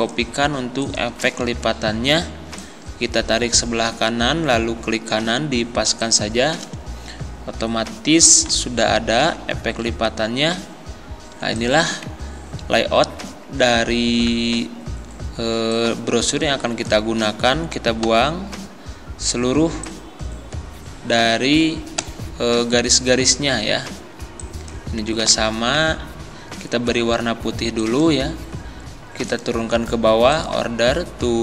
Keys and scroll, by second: 7.6 Right, 18.1 Delete, 22.0 Delete, 25.2 ctrl+z.